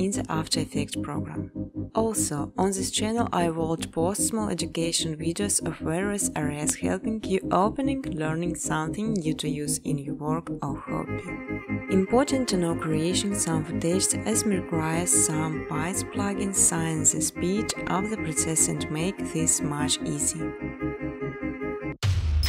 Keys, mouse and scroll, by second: 0.0-2.0 typing, 3.4 click, 4.9-5.7 typing, 5.2 click, 7.0 click, 9.8 click, 11.2 click, 12.7 click, 14.0 click, 15.2 click, 17.3 click, 17.8 click, 19.6 click, 20.7-22.4 typing.